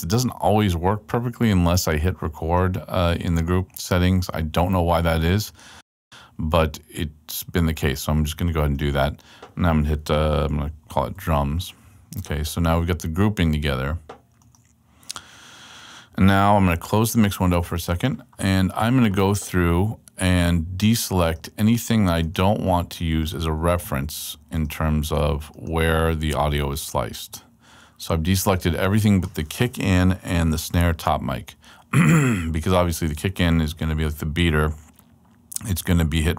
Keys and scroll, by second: 9.9-11.6 typing, 16.7 x.